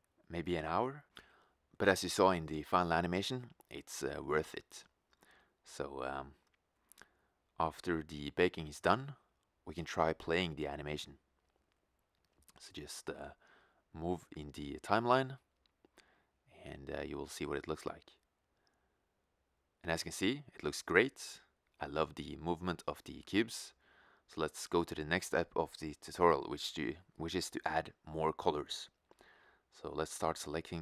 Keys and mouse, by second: 18.2-21.0 drag.